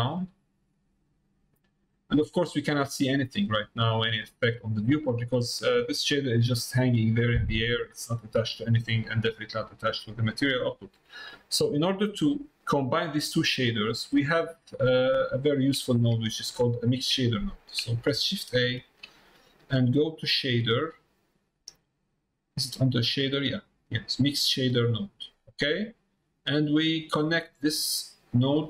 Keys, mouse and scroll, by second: 6.2 middle click, 7.6 click, 9.3 click, 10.3 middle click, 11.2 middle click, 15.2 click, 27.0 middle click.